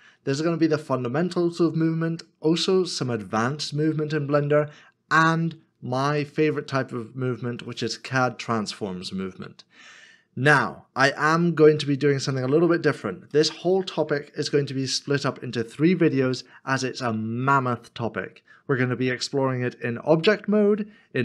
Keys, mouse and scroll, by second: 0.9-1.9 scroll down 1, 2.0 middle click, 12.3 middle click.